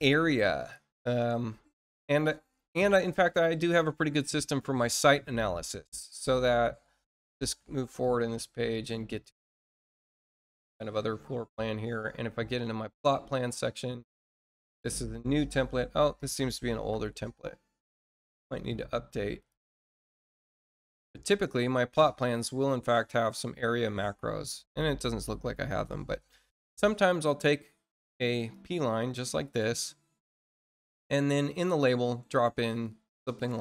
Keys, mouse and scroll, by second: 0.5 click, 2.2 scroll down 1, 2.6 middle click, 3.3 scroll down 1, 3.9 scroll up 1, 6.1 click, 7.3 click, 7.8 click, 8.6 click, 9.1 click, 9.4 click, 11.2 middle click, 11.6-12.4 scroll down 2, 12.4 click, 14.0 click, 18.5 click, 20.0 click, 21.0 click, 21.9-22.6 scroll down 4, 22.8-23.4 scroll up 4, 23.5 middle click, 24.2 scroll up 2, 26.4 click, 27.0 click, 28.3 click, 31.4 click, 32.6 click, 33.1 click.